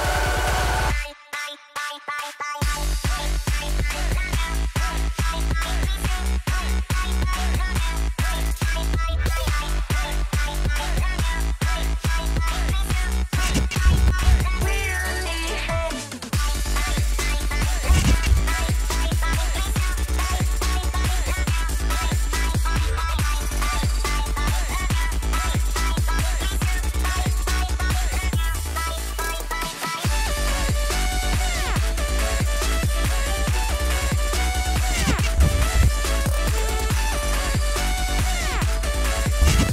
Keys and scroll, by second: 5.5 space, 7.6 space, 12.7 space, 16.5 Return, 29.8 ctrl+t, 31.5-33.5 typing.